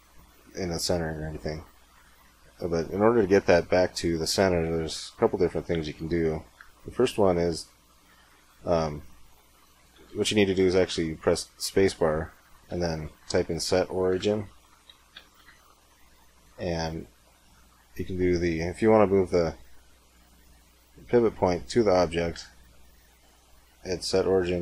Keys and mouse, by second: 1.1 middle click, 1.7-2.7 drag.